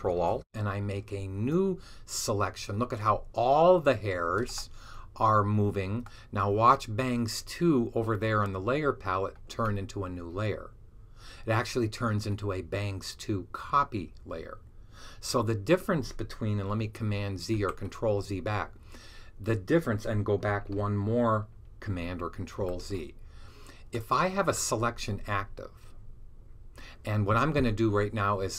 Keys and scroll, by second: 1.2 super+d, 17.4 super+z, 20.3 super+z, 22.4 z.